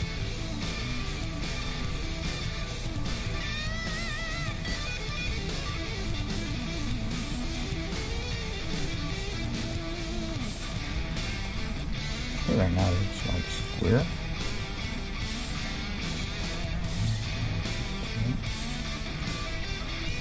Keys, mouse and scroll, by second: 0.0 g, 1.7-3.4 right drag, 1.9 g, 3.4-6.5 middle drag, 5.3 g, 7.6-9.7 right drag, 8.2 g, 9.3-14.1 middle drag, 10.2-11.7 right drag, 12.8 g, 14.6-16.5 right drag, 14.8 g, 16.5-18.4 middle drag, 17.0 g, 20.1-20.2 right drag.